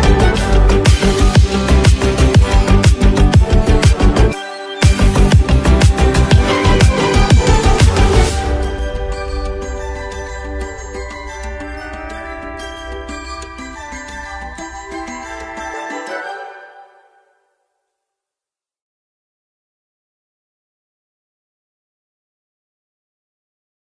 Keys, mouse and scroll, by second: 8.0 ctrl+d, 8.7-9.4 alt+scroll down 1, 10.4-10.8 alt+scroll down 1, 12.5 click.